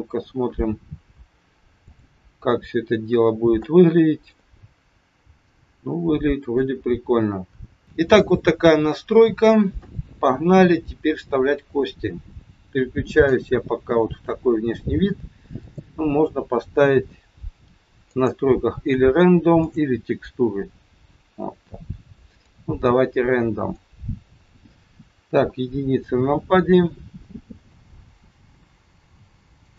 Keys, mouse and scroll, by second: 0.9 scroll down 2, 1.9 click, 2.7-3.3 scroll up 4, 3.7 shift+middle click, 4.6 scroll up 1, 5.4 middle click, 6.8-7.4 scroll down 4, 7.4 scroll down 1.